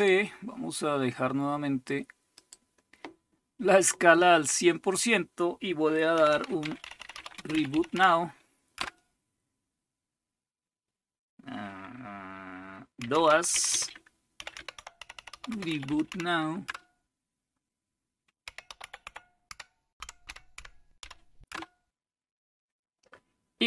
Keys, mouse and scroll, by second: 2.4 click, 2.6 click, 5.9-8.7 typing, 12.8-16.6 typing, 18.2-21.5 typing.